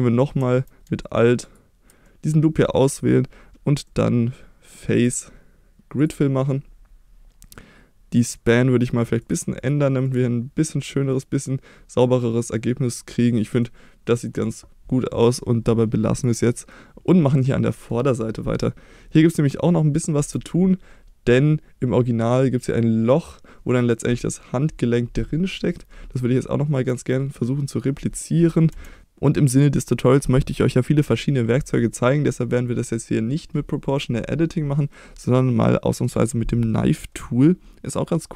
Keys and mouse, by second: 1.5 alt+click, 2.1 middle click, 2.6-3.0 middle drag, 3.9 middle click, 5.1-6.1 drag, 8.4 click, 9.3 click, 9.6 click, 11.1-12.6 middle drag, 13.7 middle click, 16.7 middle click, 20.2 KP_1, 28.7 3, 29.0-31.1 middle drag, 35.1-36.0 middle drag.